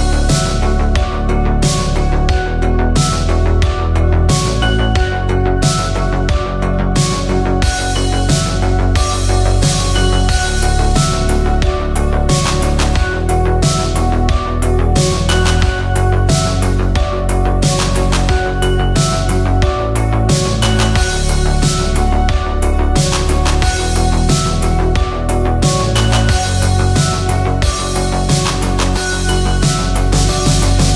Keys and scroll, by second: 19.9 r, 28.5-29.4 typing.